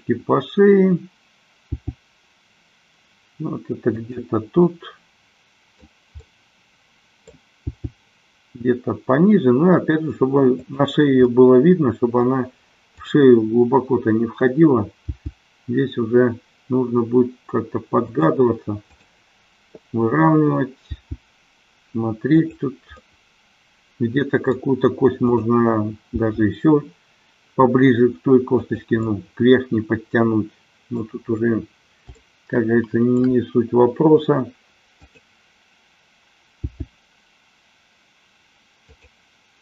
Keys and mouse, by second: 2.0 g, 4.2 click, 4.6-6.0 middle drag, 6.3-7.5 middle drag, 7.8 g, 10.8 click, 11.3-12.2 middle drag, 13.1 click, 15.2 g, 18.2 click, 19.0-20.3 drag, 21.1 g, 22.6 drag, 23.1-24.6 middle drag, 25.3-26.7 drag, 26.8 g, 28.7 click, 29.1-31.1 middle drag, 32.2-33.3 shift+middle drag, 34.8-36.0 drag, 36.7 g, 39.1 click.